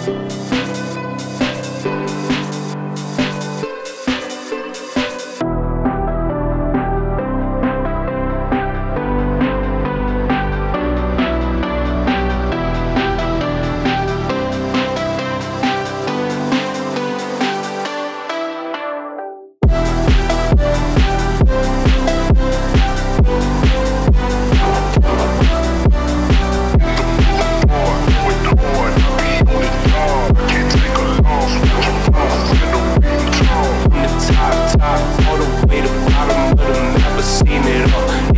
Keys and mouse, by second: 3.8 click, 10.7 click, 11.3 click, 12.3 Tab, 12.8 Tab, 14.7 Tab, 15.2 1, 15.5 click, 16.4 g, 18.0 shift+click, 18.4 g, 20.1 click, 20.3 g, 21.9 click, 22.1 g, 23.1 g, 24.3 click, 24.5 g, 28.6 click, 29.2 g, 32.4 click, 32.6 g, 34.6 click, 35.0 shift+click, 35.4 g, 36.9 click, 37.7 shift+click, 38.1 click.